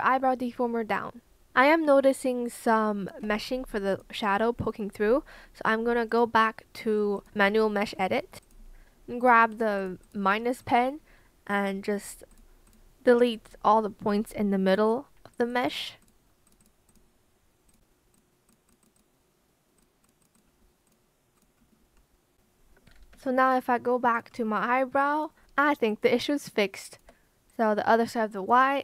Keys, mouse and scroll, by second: 23.1 Escape, 26.3 shift+click, 28.2 shift+click.